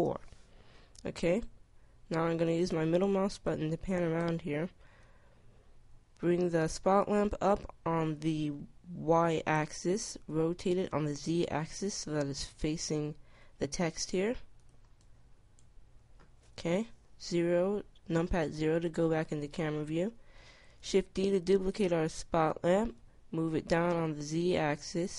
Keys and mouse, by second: 0.9 middle click, 4.6-6.2 drag, 9.8 r, 13.4 r, 14.1 click, 16.5 KP_0, 20.7 shift+d, 22.4 right click.